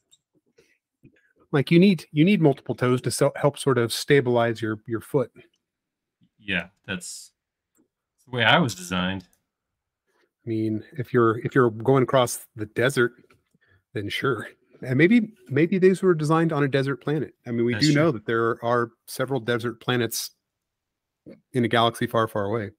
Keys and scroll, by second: 4.6 space, 5.5 e, 7.9 typing, 9.9 space, 12.6 m.